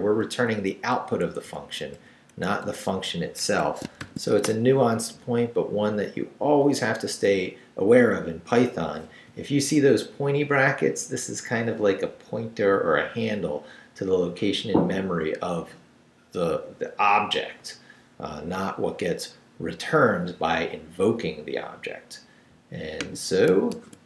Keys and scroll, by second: 0.3 Left, 1.2 Right, 1.9 Left, 2.3 Right, 2.6 Left, 3.4 Escape, 4.0 shift+;, 4.3 shift+w, 4.4 Return, 23.7 super+r.